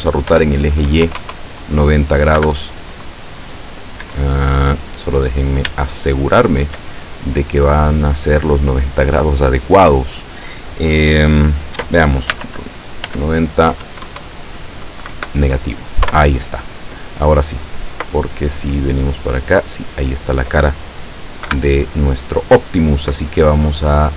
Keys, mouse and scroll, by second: 0.3 y, 1.0 KP_9, 1.2 KP_0, 2.4 KP_Subtract, 4.0 Escape, 6.0 shift+middle click, 7.0-7.8 shift+scroll up 4, 12.3 r, 13.0 y, 13.7 KP_9, 14.1 KP_0, 15.1 KP_Subtract, 16.1 KP_Enter, 17.6-20.8 middle drag, 21.5 KP_7, 23.9-24.1 drag.